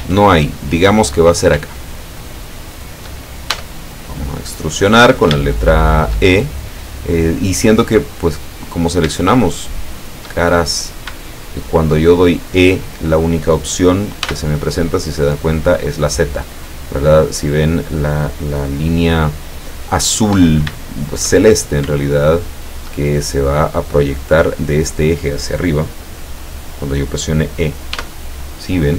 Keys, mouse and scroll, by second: 0.2 ctrl+shift+click, 1.3 shift+right click, 1.9 shift+right click, 2.3 shift+right click, 2.8 shift+right click, 3.6 shift+e, 5.2 shift+click, 5.6 shift+middle click, 6.8 middle click, 8.7 right click, 9.3 shift+right click, 9.7 shift+right click, 10.0 shift+right click, 10.4 shift+middle click, 11.2 shift+click, 14.3 e, 17.0 click, 20.8-21.5 shift+middle drag, 21.5-21.9 shift+scroll up 1, 22.2-23.0 shift+middle drag, 28.0 e.